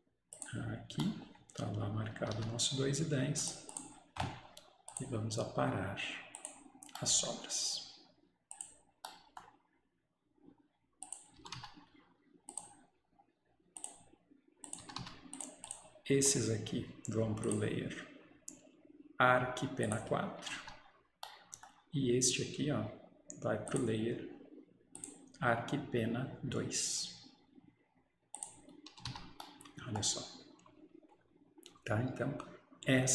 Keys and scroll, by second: 2.4 Escape, 11.5 Escape, 11.6 Escape, 14.9 Escape, 15.0 Escape, 20.5 Escape, 20.6 Escape, 29.0 Escape, 29.2 Escape.